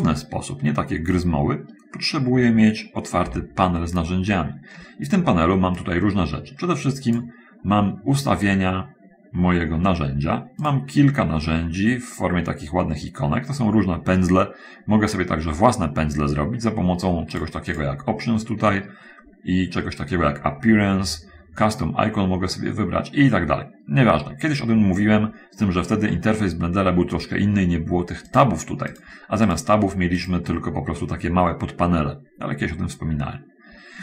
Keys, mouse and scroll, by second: 3.5 t, 6.2-7.7 drag, 17.7 click, 18.1 click, 28.7 click, 29.1 click, 29.9 click.